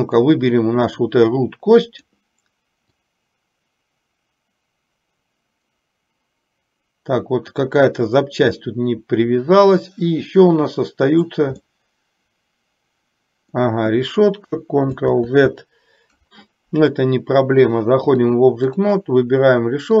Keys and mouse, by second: 0.2 click, 2.1 click, 3.0-11.6 drag, 11.8-13.7 middle drag, 15.1 ctrl+z, 18.2 click.